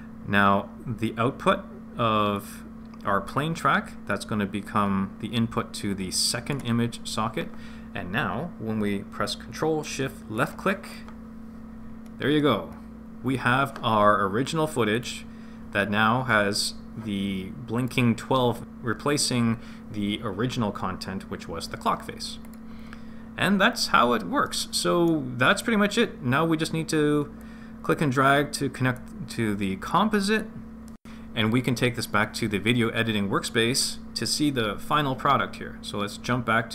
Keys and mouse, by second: 2.4 click, 2.6 click, 4.5-6.9 drag, 10.4 ctrl+shift+click, 15.0 click, 17.8 click, 22.5 click, 24.5 middle click, 27.4-29.1 drag, 29.9 click, 30.2 click.